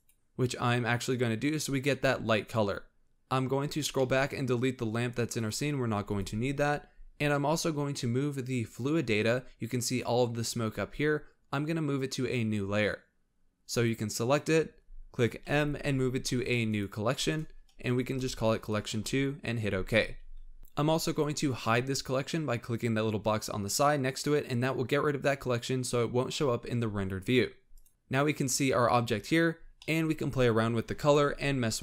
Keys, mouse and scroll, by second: 3.0-4.2 middle drag, 4.2-4.9 scroll down 3, 4.4 middle click, 5.6 click, 5.8 x, 6.9 scroll up 3, 9.7 scroll up 1, 13.7 click, 15.5 m, 24.7 click, 27.7 click, 27.9-29.3 scroll up 2, 29.5-31.8 scroll up 3, 29.8 middle click.